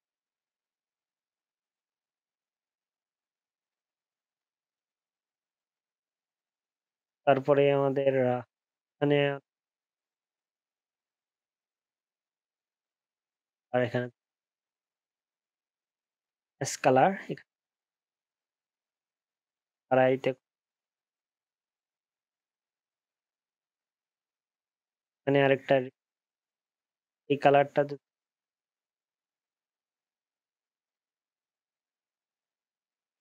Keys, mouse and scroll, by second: 11.7 ctrl+scroll down 1, 11.9 ctrl+z, 12.4 ctrl+shift+z, 13.3 ctrl+z, 15.7 ctrl+z.